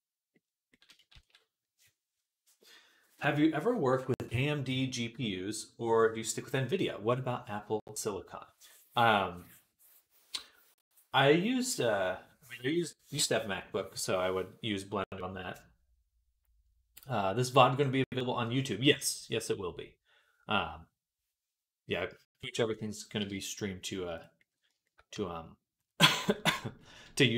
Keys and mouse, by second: 1.0 ctrl+s, 24.0 click, 25.0 Tab, 26.1-27.3 shift+middle drag.